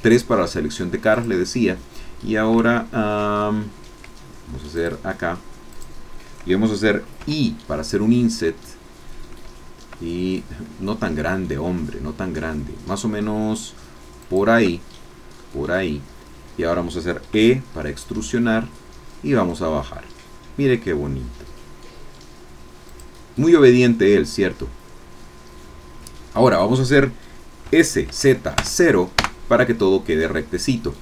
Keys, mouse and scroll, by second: 0.0 shift+click, 1.3 shift+click, 4.7 shift+click, 5.7 shift+click, 7.4 i, 14.2 shift+click, 15.0 shift+scroll down 1, 15.4-16.8 drag, 17.3 e, 22.8 click, 23.4-27.6 middle drag, 27.6 s, 28.0 z, 28.6 KP_0, 29.2 KP_Enter.